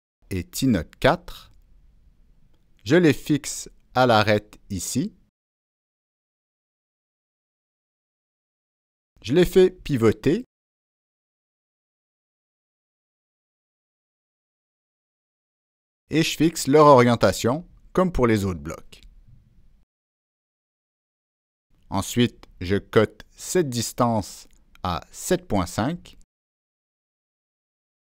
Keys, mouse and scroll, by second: 2.3 click, 2.9 Escape, 3.6-4.9 drag, 6.0-7.7 drag, 9.4-10.8 drag, 12.2-13.5 drag, 15.9 click, 16.7 click, 17.6 click, 19.2 click, 20.4 click, 21.3 click, 22.5-22.8 right drag, 23.6 click, 23.7 right click, 25.1 click, 25.6 click, 27.8 Return.